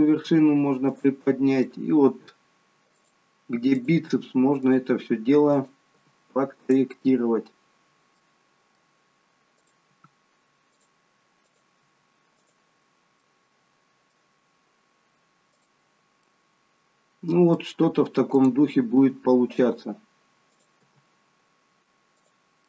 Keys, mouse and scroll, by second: 0.3 g, 1.7 click, 2.2 g, 3.9 click, 4.2 g, 5.6 click, 6.1 g, 8.3 middle click, 9.6 click, 10.0 g, 11.6 click, 11.9 g, 13.3 middle click, 15.7 click, 16.3 middle click, 18.4 click, 19.0 g, 20.6 click, 20.9 g.